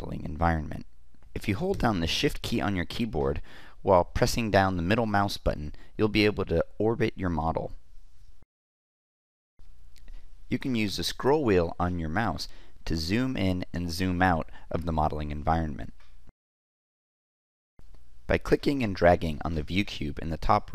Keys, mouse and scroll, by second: 10.4-11.0 scroll up 2, 11.0-12.2 scroll up 1, 12.2-14.3 scroll up 1, 14.3 scroll up 1, 14.4-15.3 middle drag, 14.4-15.1 scroll down 2, 15.1-17.4 scroll down 1, 16.2-17.4 middle drag.